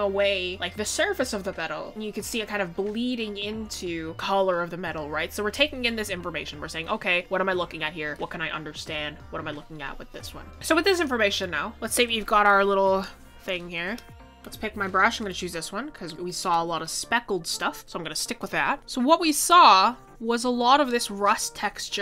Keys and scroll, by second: 15.8 ctrl+z.